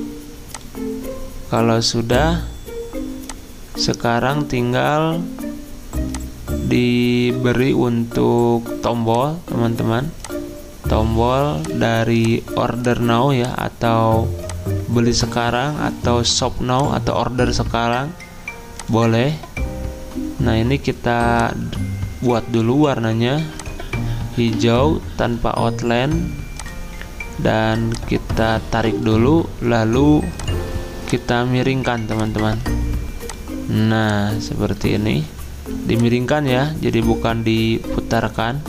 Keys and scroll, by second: 35.1 ctrl+z.